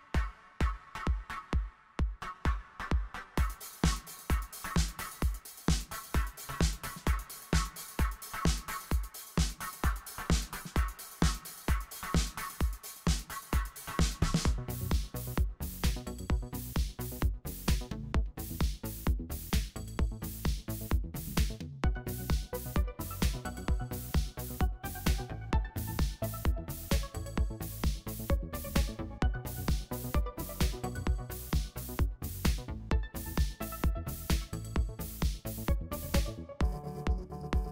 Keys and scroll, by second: 0.7 BackSpace, 5.3 shift+super+g, 8.5 BackSpace, 9.2 super+a, 14.4 super+a, 20.8 super+s, 21.1 super+0, 28.0-28.8 typing.